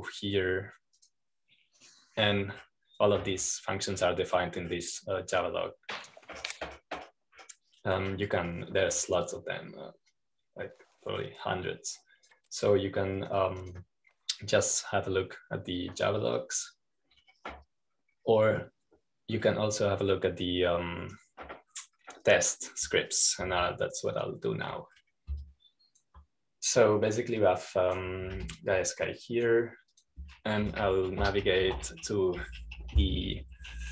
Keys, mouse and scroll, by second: 0.0 click, 0.9-1.4 scroll down 2, 2.8 click, 4.1-4.8 scroll down 2, 7.1-7.6 scroll down 2, 8.2-9.9 scroll up 2, 10.7-11.3 scroll down 2, 12.0-14.8 drag, 15.5-17.7 drag, 18.9-19.6 scroll down 1, 19.6-20.9 scroll up 1, 27.8 click, 29.3-30.3 drag, 30.3 Home, 30.4 click, 30.9-32.7 drag, 32.7-33.9 typing.